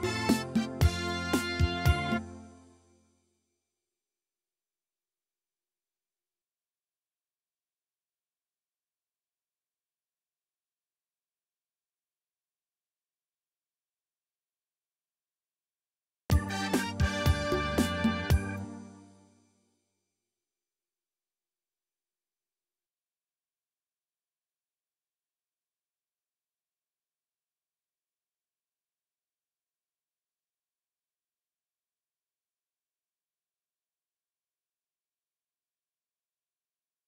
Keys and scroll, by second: 2.1 space, 16.2 space, 18.6 space.